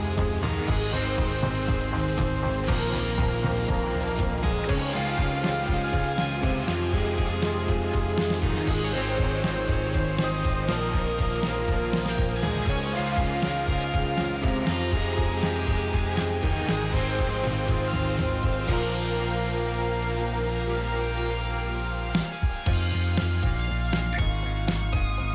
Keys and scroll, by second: 4.9 space, 8.3 2, 8.9 space, 11.5 q, 13.8 Delete, 15.2 space, 15.9 space, 17.0 space, 18.3 space, 19.3 q, 21.6 KP_0, 21.6 Return, 21.8 space, 23.2 space.